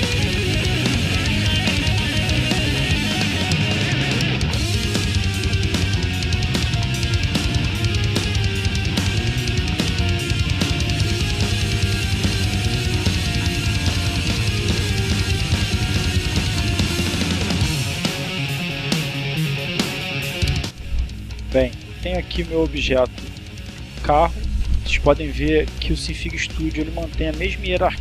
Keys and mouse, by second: 1.1 click, 1.9 click, 3.1-5.3 drag, 8.8-9.9 drag, 13.9-15.4 drag, 16.4-17.7 drag, 17.9-19.8 drag, 19.9 click.